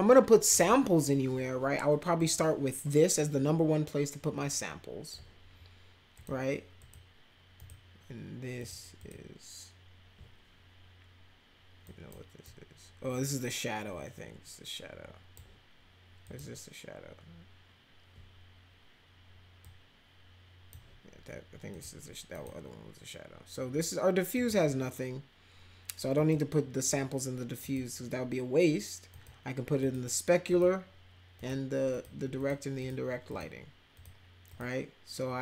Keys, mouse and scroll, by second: 2.2-5.1 drag, 6.1 click, 6.8 click, 7.6 click, 8.6 click, 9.0 click, 11.9 click, 12.4-15.3 drag, 16.2 click, 19.6-20.7 drag, 21.7 click, 22.3 click, 24.3 click, 26.2 click, 27.6 click, 29.1 click, 29.8 click, 30.5 click, 31.4 click, 31.9 click, 32.4 click, 32.8 click, 33.3 click, 33.9 click, 34.5 click.